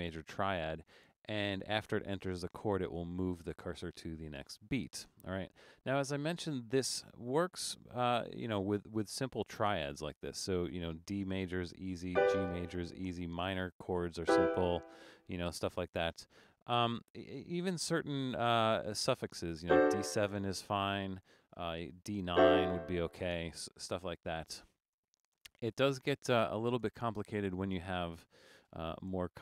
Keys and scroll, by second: 24.3-29.1 typing.